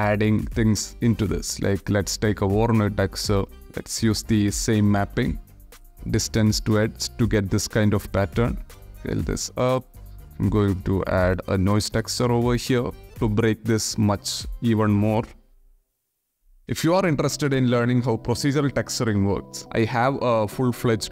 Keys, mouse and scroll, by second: 1.3 ctrl+shift+click, 2.6 click, 3.7 alt+click, 4.6 click, 5.2-5.5 drag, 8.3 click, 8.5 middle click, 8.8 click, 9.6 shift+a, 15.5 click, 16.4 shift+click, 19.6 Down.